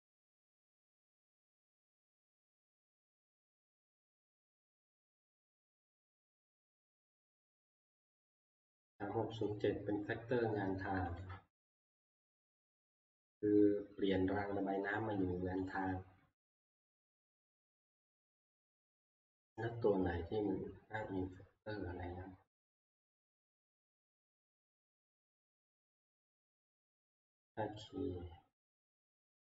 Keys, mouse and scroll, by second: 0.0 click, 1.3 click, 6.0 click, 9.5 click, 11.2 click, 15.8 click, 25.1 click, 25.4 click, 25.6 click, 25.9 click, 26.1 click, 26.3 click, 26.5 click, 27.8 click.